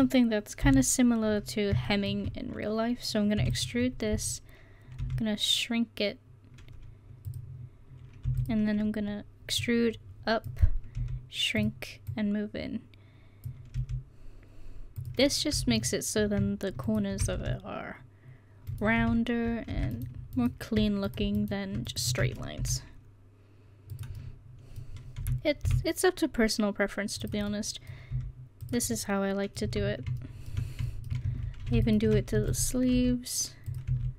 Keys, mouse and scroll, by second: 0.6 KP_1, 3.4 e, 5.0 s, 8.3 e, 9.6-11.6 drag, 11.0 s, 12.1-13.8 drag, 13.8 s, 17.4 s, 19.0 ctrl+z, 22.6 s, 25.2 s, 27.6 middle click, 28.1 s, 29.7 Tab, 31.3 Tab, 32.4 e, 32.9 s, 33.9 e.